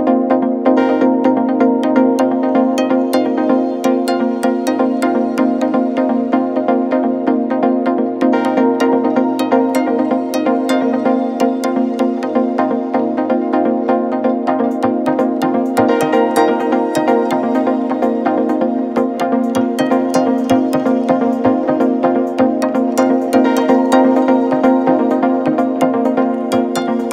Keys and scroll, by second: 3.1 Down, 4.5 Return, 10.6 alt+Tab, 12.0 alt+Tab, 13.6 Tab, 14.4 Tab, 18.5 ctrl+c, 19.2 Tab.